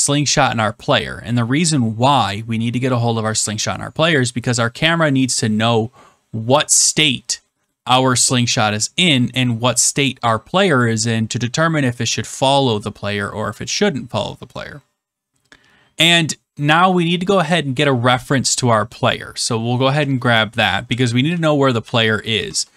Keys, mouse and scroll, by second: 19.8 Return, 20.6-22.4 typing.